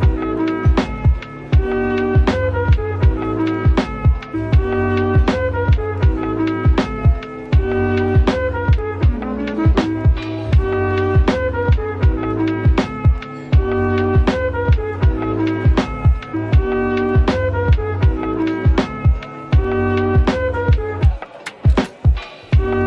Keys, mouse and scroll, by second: 3.3 scroll down 1, 5.9 s, 7.5-7.8 scroll up 1, 8.4 right click, 9.4 middle click, 10.5-11.7 typing, 12.6-13.1 scroll down 1, 13.1 typing, 13.9 middle click, 18.1 middle click, 19.9 typing, 21.0 typing.